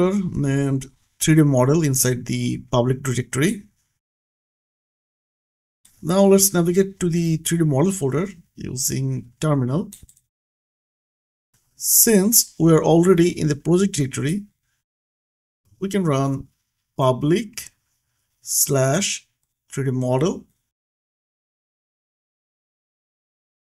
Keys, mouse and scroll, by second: 0.3 click, 5.4 middle click, 5.7 click, 7.0 scroll down 1, 7.4-8.3 scroll up 1, 8.3 click, 11.3 click, 11.5 BackSpace, 13.5 click, 16.6-19.1 typing, 16.7 click, 21.5 click.